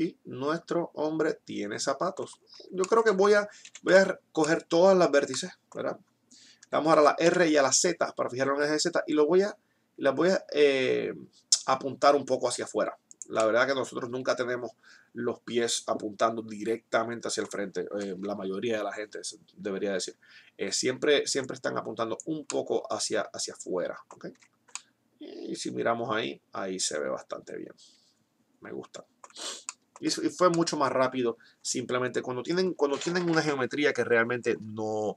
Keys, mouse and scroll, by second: 2.5 middle click, 3.3 Tab, 3.8 a, 7.3 r, 21.7-22.8 drag, 22.8-24.3 middle drag, 24.3 Tab, 24.8-26.7 middle drag, 29.7 middle click.